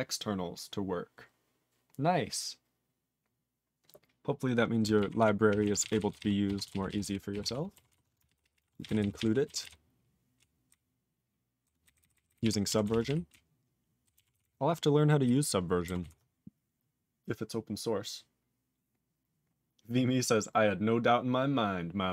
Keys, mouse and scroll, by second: 5.2 ctrl+s, 5.5 ctrl+p, 5.6 ctrl+a, 5.8 ctrl+space, 5.8 ctrl+e, 5.8 ctrl+n, 6.0 ctrl+n, 6.1 ctrl+g, 6.2 ctrl+e, 6.6 ctrl+s, 6.8 ctrl+p, 6.9 ctrl+p, 7.0 ctrl+p, 7.3 ctrl+p, 7.4 ctrl+e, 7.9 ctrl+s, 8.3 ctrl+p, 8.4 ctrl+p, 8.5 ctrl+p, 8.6 ctrl+a, 8.7 ctrl+space, 8.8 ctrl+e, 8.9 ctrl+n, 9.0 ctrl+n, 9.1 ctrl+g, 9.2 ctrl+e, 9.6 ctrl+s, 9.7-10.3 ctrl+p, 10.7-11.6 ctrl+n, 11.8 ctrl+n, 12.0 ctrl+n, 12.1 ctrl+n, 12.3 ctrl+n, 12.4 ctrl+e, 12.8 ctrl+s, 12.9 ctrl+p, 13.0 ctrl+p, 13.3 ctrl+n, 13.8 ctrl+n, 14.3 ctrl+s, 14.4-15.2 ctrl+n, 16.0 ctrl+s.